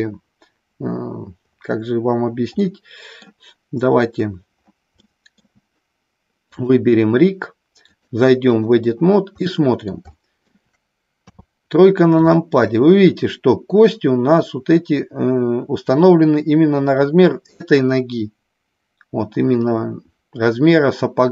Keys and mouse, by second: 2.6 middle click, 4.9 shift+middle click, 6.4 click, 7.8 click, 9.4 middle click, 9.9 shift+middle click, 11.3 KP_3, 12.2 shift+middle click.